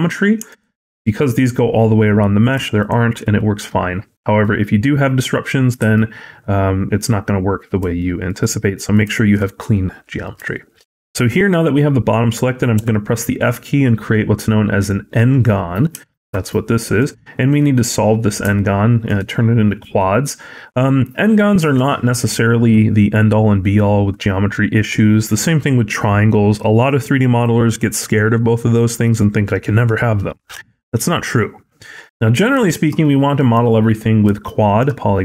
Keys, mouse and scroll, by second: 0.3 alt+click, 0.6 middle click, 1.8-2.4 scroll down 2, 2.6 alt+click, 3.2 middle click, 3.6-4.0 scroll up 2, 4.0 middle click, 5.6 middle click, 7.8 shift+middle click, 8.3 middle click, 9.0 shift+middle click, 9.6 middle click, 10.4 shift+middle click, 10.7-11.1 scroll up 1, 11.1 middle click, 12.6 f, 15.9 shift+middle click, 16.3 middle click, 17.8 middle click, 18.4 shift+middle click, 32.5 shift+middle click, 32.9 middle click, 33.4-34.1 scroll down 3, 33.8 middle click, 34.3 shift+middle click.